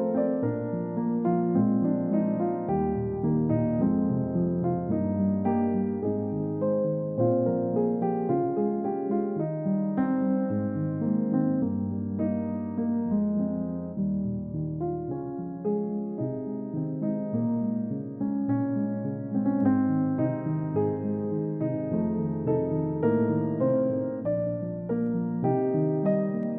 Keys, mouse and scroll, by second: 0.0 double click, 0.6 scroll down 1, 1.0 middle click, 1.6 double click, 1.9 middle click, 2.2-2.8 scroll up 1, 8.0-8.7 scroll down 1, 10.4 space, 11.3 i, 13.4 double click, 13.7 scroll down 1, 14.6 double click, 14.8 scroll up 1.